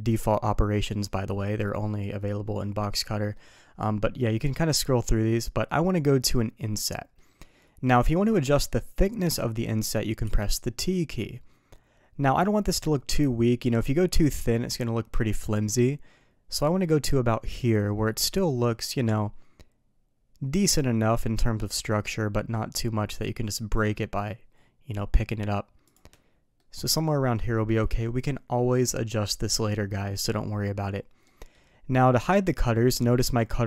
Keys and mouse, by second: 26.6-27.7 middle drag, 31.2 middle drag.